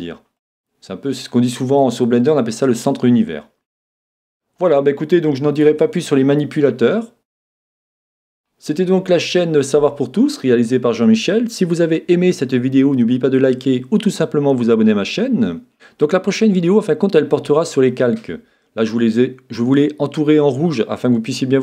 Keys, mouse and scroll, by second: 0.4-3.7 middle drag, 3.7 middle click, 4.0-5.8 middle drag, 5.7 Tab, 6.6-8.5 middle drag.